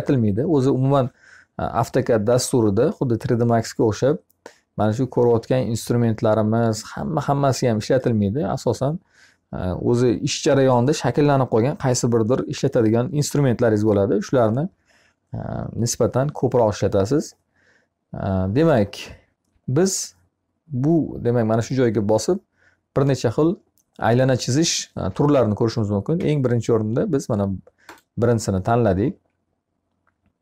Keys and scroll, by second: 25.5 Escape.